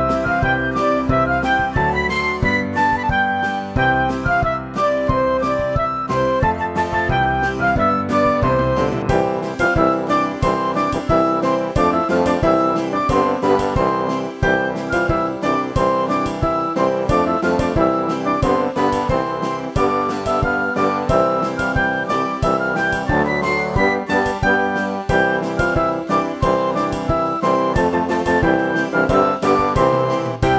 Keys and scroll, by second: 0.0 Delete, 0.7 Delete, 1.2 Delete, 3.8 Delete, 26.5 Right, 26.9 Right.